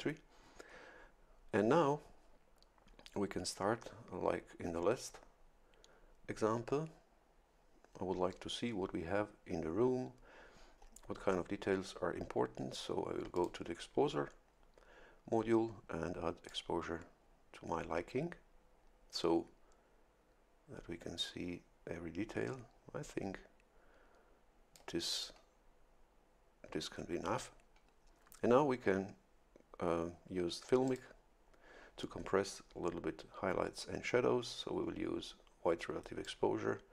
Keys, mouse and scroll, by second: 13.3 click, 16.5-25.0 drag, 30.8 click, 36.2-36.9 drag.